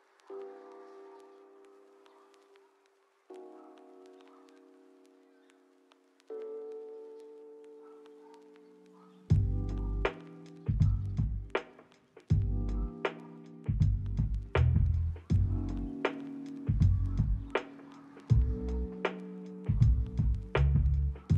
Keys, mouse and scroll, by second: 0.2 middle click, 1.1 double click, 1.6 middle click, 2.7 double click, 3.5 middle click, 4.0 double click, 4.4 middle click, 4.7 double click, 5.6 middle click, 6.0 ctrl+middle click, 8.9 ctrl+click, 9.0 g, 9.4 ctrl+click, 9.6 g, 10.0 ctrl+z, 10.1 ctrl+z, 11.9 middle click, 12.4 middle click, 12.7 s, 12.9 right click, 14.7 double click, 15.4 middle click, 15.8 double click, 18.3 middle click, 18.8 double click, 21.2 middle click.